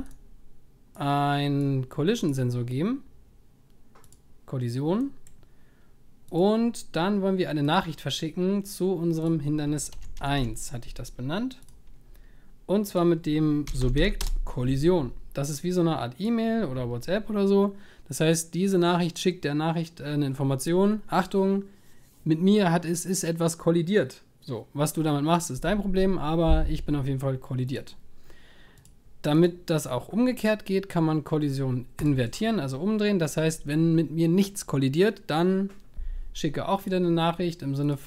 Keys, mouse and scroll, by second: 0.0 click, 1.0 click, 37.9-38.0 drag.